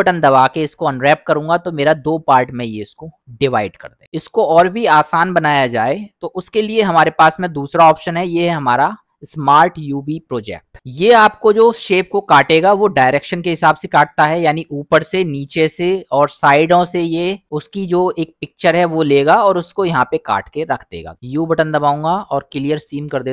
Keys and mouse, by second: 1.3 middle click, 7.2 u, 15.8 middle click, 17.2 middle click, 21.1 u.